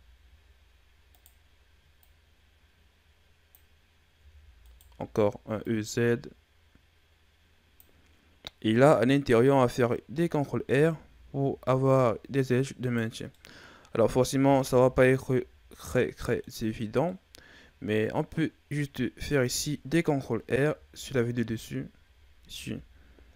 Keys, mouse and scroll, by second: 1.9 click, 4.1 e, 5.5 click, 10.6 ctrl+r, 13.3-14.3 middle drag, 14.3 z, 14.9 shift+scroll down 5, 15.2-16.7 middle drag, 16.7 scroll down 2, 17.0-20.0 middle drag, 20.5 KP_7, 22.4 ctrl+r.